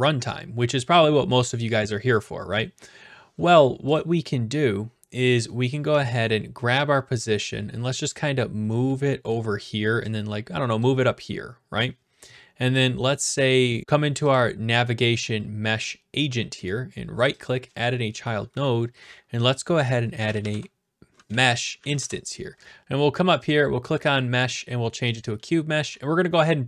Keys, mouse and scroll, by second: 4.0 click, 5.9 w, 7.9 click, 8.2 a, 9.3 right click, 10.8 click, 11.3-11.8 typing, 11.9 right click, 12.8 click, 13.1 right click, 13.8 click, 14.3 click, 16.7 right click, 17.4 click, 19.9-21.0 typing, 21.9 Down, 21.9 Return, 22.6 click, 23.5-24.5 drag, 25.2-26.3 drag, 25.9 d, 26.4-26.6 right drag.